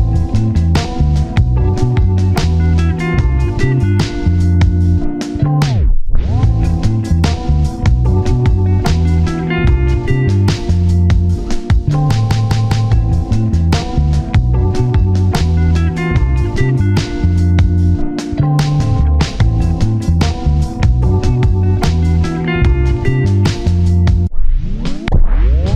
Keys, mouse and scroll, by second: 0.3 alt+click, 0.6 scroll down 1, 0.8-3.0 typing, 5.6 typing, 5.6 alt+z, 5.7-6.6 scroll down 1, 6.7 double click, 7.3-8.1 typing, 8.6 alt+z, 8.8-9.5 scroll up 1, 10.1-10.5 scroll up 1, 10.6 shift+click, 11.2 shift+click, 11.9 typing, 12.9 scroll down 1, 13.0 typing, 14.1 alt+z, 15.9-16.5 scroll down 1, 16.5 double click, 17.5 scroll up 1, 17.7 scroll down 1, 17.9 1, 18.0 shift+middle click, 18.8 scroll up 1, 19.0 alt+z, 19.6 alt+click, 19.9-20.3 typing, 20.8 alt+z, 23.2 scroll down 1, 23.5-23.8 typing, 24.4 double click.